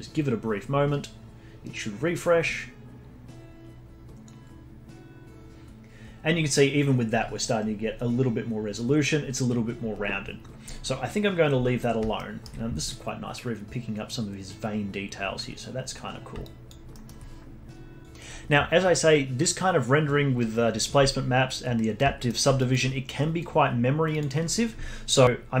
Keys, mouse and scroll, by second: 12.1-15.1 alt+middle drag, 15.6-16.4 scroll down 7, 16.4 alt+click, 16.9-18.0 alt+middle drag, 22.1 middle click, 22.5-24.2 alt+drag, 25.2-25.6 scroll down 1.